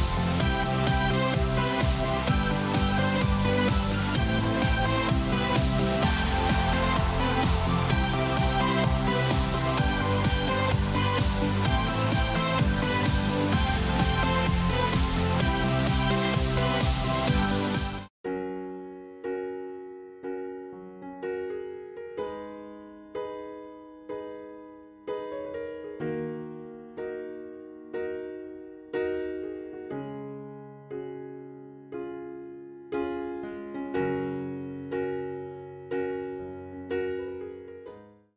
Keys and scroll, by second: 3.9 ctrl+shift+].